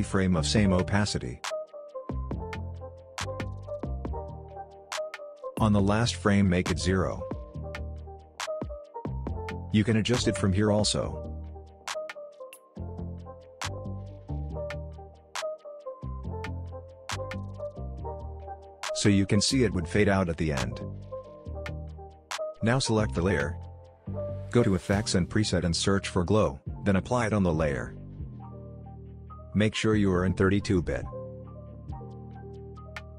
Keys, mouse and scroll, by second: 11.6 space, 17.1 space, 17.4-21.4 drag, 24.0-25.3 typing, 26.1-27.3 drag, 29.6 click.